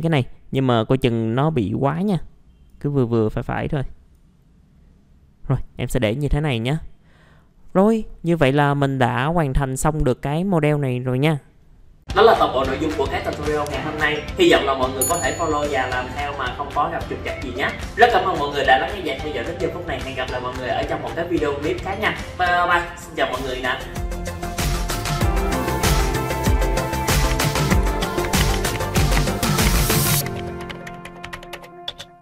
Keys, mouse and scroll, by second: 0.3-3.3 drag, 6.2 scroll down 1, 6.6-7.6 scroll up 1.